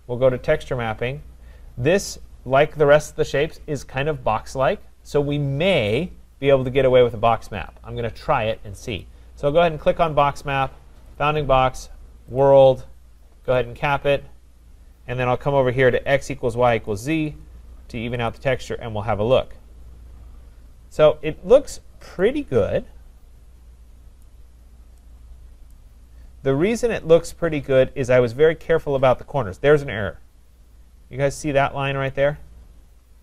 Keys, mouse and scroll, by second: 0.6 click, 9.0 click, 11.2 click, 12.4 click, 13.6 click, 17.0 click, 18.2 click, 19.3-19.9 scroll, 19.9 scroll, 20.7 scroll, 21.7 scroll, 24.5 right click, 26.0-26.5 scroll, 26.5 right click, 27.1-27.4 scroll, 28.0 scroll, 29.8 scroll.